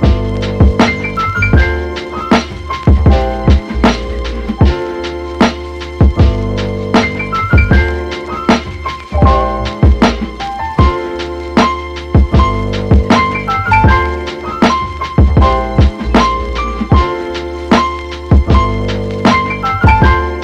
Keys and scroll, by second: 4.5 x, 4.8 super+z, 5.0 super+z, 5.5 super+z, 6.5 super+z.